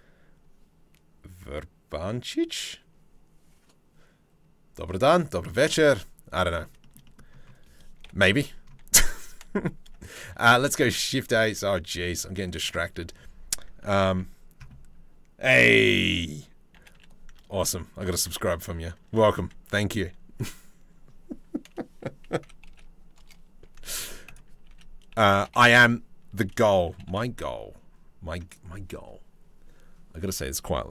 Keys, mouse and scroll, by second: 4.9 middle click, 6.0 middle click, 6.4 shift+middle click, 6.7 middle click, 7.6 KP_7, 9.9 shift+s, 11.0 shift+a, 16.4 g, 18.7 Tab, 22.0 s, 24.3 s, 26.5 g.